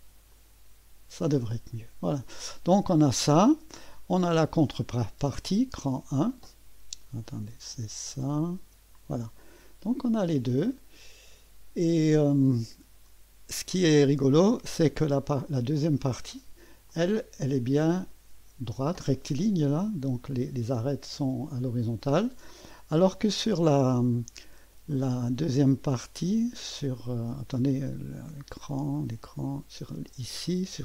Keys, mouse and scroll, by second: 0.3 click, 1.9 scroll down 1, 2.2 typing, 5.5 click, 5.9 space, 7.3 click, 7.7-8.7 typing, 8.4 click, 9.4-10.9 drag, 10.0 typing, 11.8 click, 12.9-14.6 scroll up 1, 15.0 click, 15.6 space, 16.9-18.2 drag, 18.4 click, 18.7 click, 19.5 shift+9, 24.2-25.3 scroll up 1, 28.1 click, 29.5 click, 30.0 space.